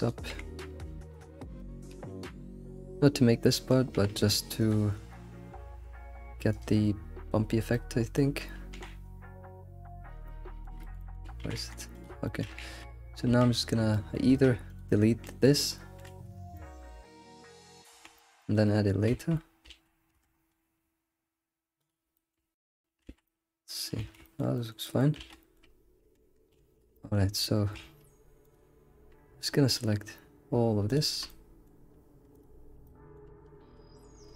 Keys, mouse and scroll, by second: 0.3 g, 1.6 click, 1.9 g, 3.5 click, 3.9 g, 4.9 click, 5.5 g, 10.2 middle click, 10.5 g, 11.0 alt+middle click, 11.4 g, 12.2 shift+middle click, 12.5 scroll down 1, 12.6 alt+x, 13.3 Tab, 13.4 Tab, 13.6-13.9 scroll down 1, 13.9 shift+middle click, 14.3 Tab, 14.7 alt+click, 15.2 middle click, 16.1 alt+Left, 16.1 alt+z, 16.5 middle click, 16.9 alt+click, 17.5 scroll down 2, 17.9 right click, 18.1 alt+middle click, 18.8 right click, 19.1 alt+shift+z, 19.7 alt+shift+z, 20.1 Tab, 20.4-20.7 scroll up 3, 21.9 click, 22.2-22.7 shift+middle drag, 23.0 scroll down 1, 23.1 alt+shift+z, 23.3-24.0 middle drag, 24.0 alt+shift+z, 24.0 ctrl+s, 24.3 alt+middle drag, 24.6 alt+middle click, 24.9 alt+middle click, 25.5 shift+middle click, 25.8 scroll up 2, 26.0 Tab, 26.1 Tab, 26.3 scroll up 1, 26.6 alt+x, 26.9 shift+middle click, 27.8 alt+x, 28.4 click, 28.8 scroll down 2, 29.7 ctrl+click, 30.9 shift+click, 31.3-32.3 middle drag, 32.3 ctrl+click, 32.6 scroll down 2, 32.8-34.2 middle drag, 34.2 ctrl+click.